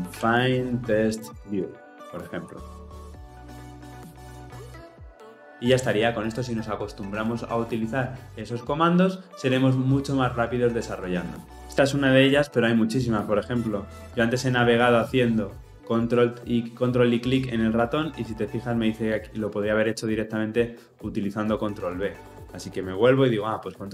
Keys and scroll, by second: 17.4 ctrl+b, 21.4 ctrl+alt+Left, 23.7 ctrl+b.